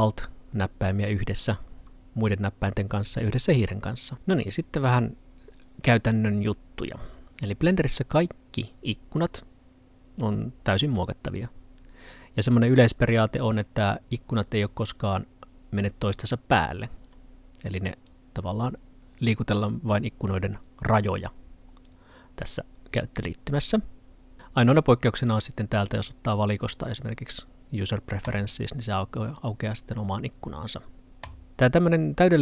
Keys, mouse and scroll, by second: 14.1 click.